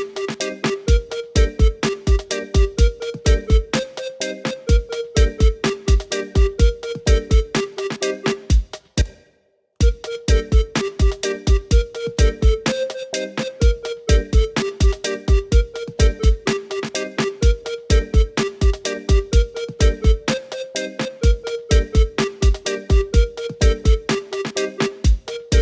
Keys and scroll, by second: 9.0 space.